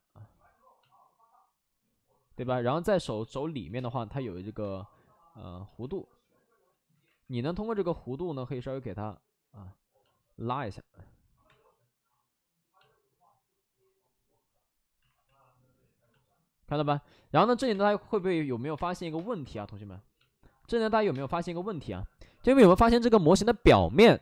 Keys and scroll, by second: 2.4 alt+s, 3.6 5, 3.6 space, 4.5 space, 4.8 ctrl+z, 5.7 alt+s, 6.6 ctrl+z, 7.0 alt+s, 7.5 ctrl+z, 11.4 3, 11.6 3, 14.9 alt+s, 17.3 alt+s, 17.6-19.0 typing, 21.0 space.